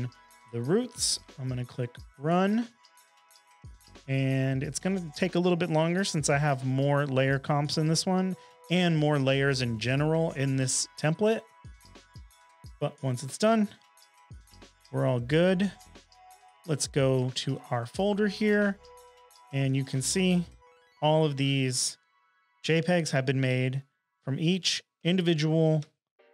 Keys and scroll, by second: 0.0-0.2 typing, 14.9 super+Tab, 20.1 space, 21.8 space, 22.6 space.